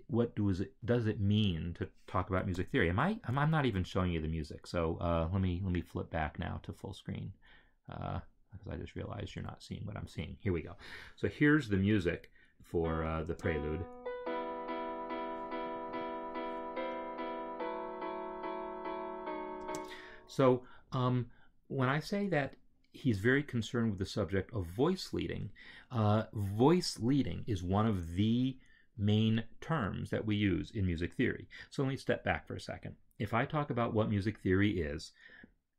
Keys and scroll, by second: 9.3 alt+Tab, 13.2 space, 19.6 space.